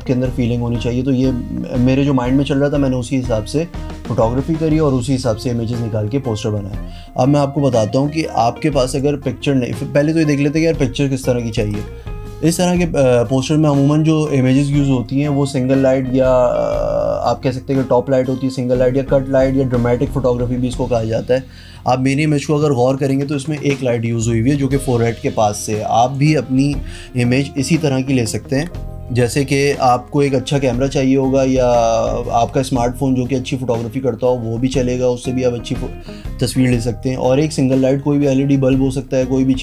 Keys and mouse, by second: 8.9 click, 11.5 click, 11.7 click.